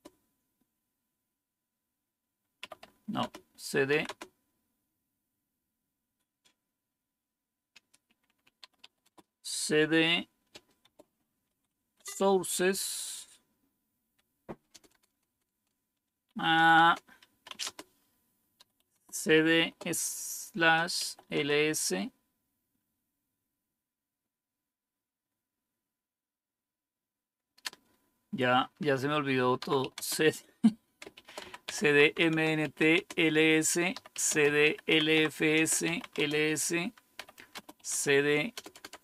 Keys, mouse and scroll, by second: 2.3-4.1 typing, 3.1 Return, 8.3-9.2 typing, 10.5-12.2 typing, 13.7-15.2 typing, 17.5-19.3 typing, 20.5 Return, 20.6-21.4 typing, 29.2-39.0 typing, 32.2 Return.